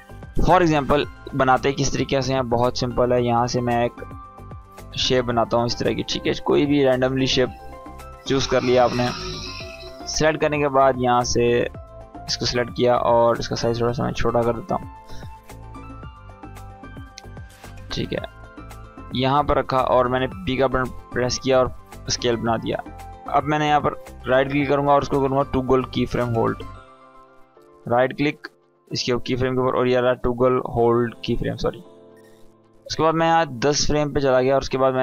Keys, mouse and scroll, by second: 2.7-3.1 click, 13.8 s, 14.8 s, 15.2 s, 15.9 s, 16.6-17.8 drag, 20.4 p, 21.2 click, 23.3 right click, 24.9 click, 26.9 right click, 31.4-34.1 drag.